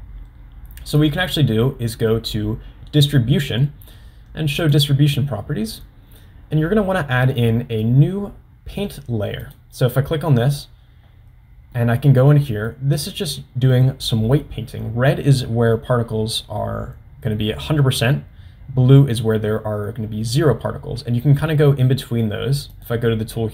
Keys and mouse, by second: 4.8 click, 9.6 click, 11.9 middle click, 13.9 middle click, 22.9 drag.